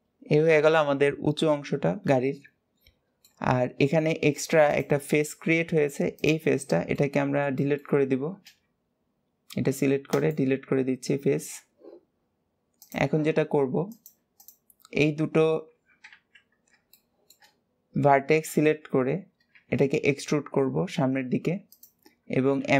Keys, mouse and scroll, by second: 4.5 click, 5.1 scroll up 2, 5.9 click, 6.3-8.2 shift+middle drag, 10.9 scroll down 1, 12.6 click, 13.7 click, 14.2 shift+click, 15.4 KP_1, 16.3-16.7 scroll down 2, 16.7 shift+middle click, 17.4 scroll up 2.